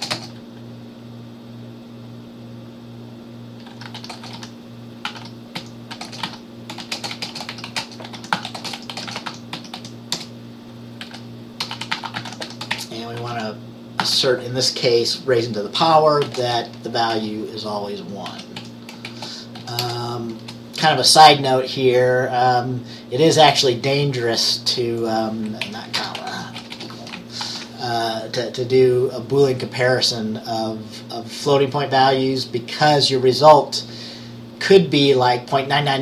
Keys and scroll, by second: 0.0-0.2 typing, 3.7-14.7 typing, 16.3-20.5 typing, 25.7 Left, 26.0 BackSpace, 26.4 space, 26.7 =, 26.8 =, 27.5 ctrl+s.